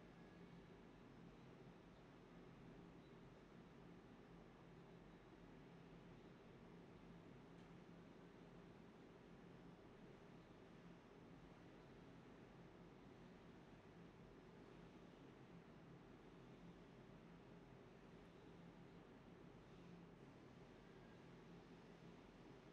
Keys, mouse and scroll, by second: 0.0-0.8 typing, 1.2 alt+click, 1.5 ctrl+z, 1.8 typing, 3.0 typing, 4.2-4.6 typing, 6.3 typing, 7.7 typing, 10.0 alt+click, 13.2 alt+click, 16.8 alt+click, 19.6 alt+click, 19.9 alt+click, 20.8 alt+click, 21.9 alt+click, 22.3 alt+click.